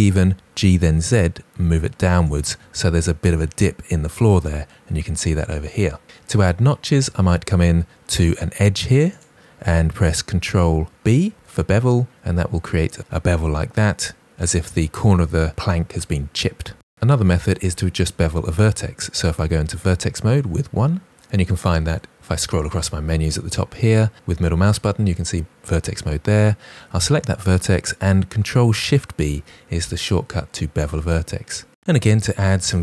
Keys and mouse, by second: 0.3 g, 0.5 z, 2.2 shift+click, 9.0 click, 11.2 ctrl+b, 16.8 middle click, 20.6 1, 26.8 click, 29.1 ctrl+shift+b, 32.5 click.